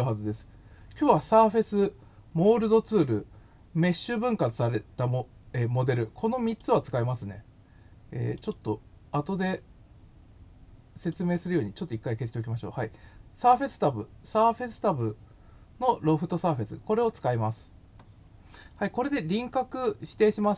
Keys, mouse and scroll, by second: 6.4 click, 8.3 right click, 10.9 click, 16.8 click.